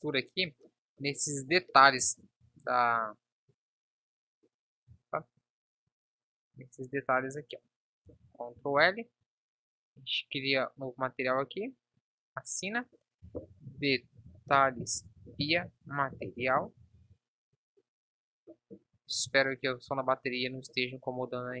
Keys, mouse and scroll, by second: 2.8 Tab, 8.8 ctrl+l, 17.0 ctrl+s, 20.5-21.6 drag.